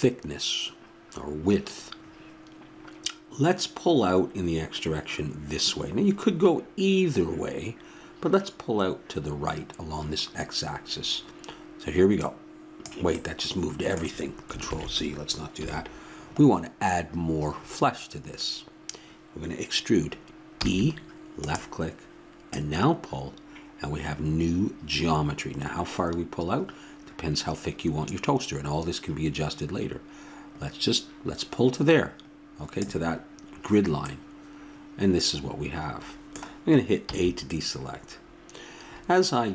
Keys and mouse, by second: 12.2-14.0 drag, 14.0 middle click, 14.6 ctrl+z, 15.6 KP_1, 20.5 e, 22.5-24.4 drag, 37.1 a.